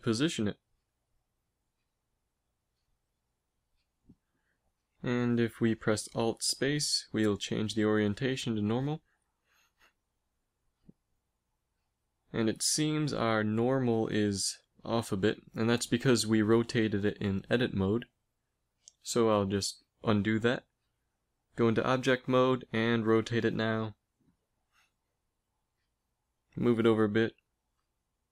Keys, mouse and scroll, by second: 1.3 z, 2.3 a, 3.5 b, 4.5 g, 5.9 alt+space, 12.2 g, 16.8 ctrl+z, 17.0 ctrl+z, 17.3 ctrl+z, 17.7 ctrl+z, 18.1 ctrl+z, 19.6 ctrl+z, 21.5 Tab, 22.6 r, 24.6 r, 25.9 g, 27.7 r.